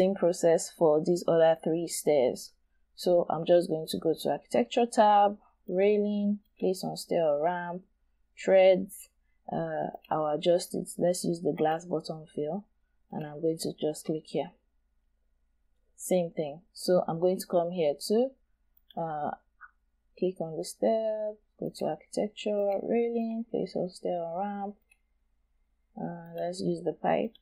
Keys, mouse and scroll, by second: 15.6-15.9 scroll down 1, 15.9-17.4 scroll up 1.